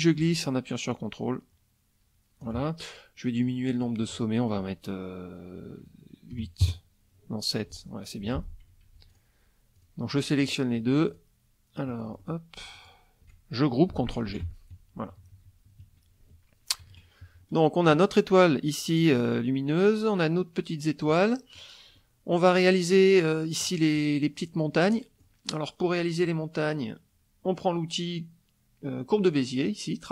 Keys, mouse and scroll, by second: 0.0-2.6 ctrl+drag, 3.7 click, 6.3 KP_7, 6.6 KP_Enter, 8.2 F1, 9.1 shift+click, 9.7 shift+click, 10.4 shift+click, 11.1 shift+click, 11.9 middle click, 12.7 shift+click, 14.3 ctrl+g, 14.7 ctrl+KP_Subtract, 16.9 KP_Subtract, 17.5 middle click, 18.9 click, 21.1 middle click, 21.5 click, 22.0 click, 23.6 middle click, 25.0 middle click.